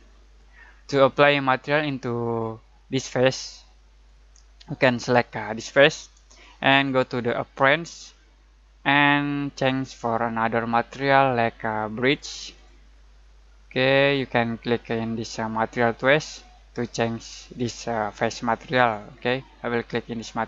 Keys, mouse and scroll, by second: 3.2 click, 10.5 click.